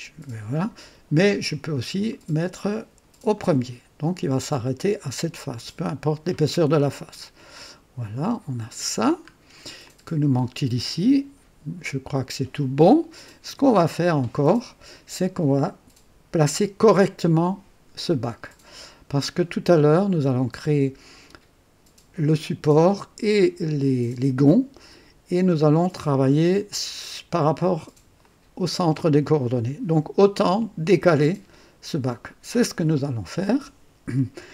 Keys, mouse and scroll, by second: 2.0 click, 3.2 click, 5.5-7.7 drag, 8.5 click, 9.4 scroll down 1, 9.8-13.6 drag, 28.2 click, 29.2 click, 30.7 click.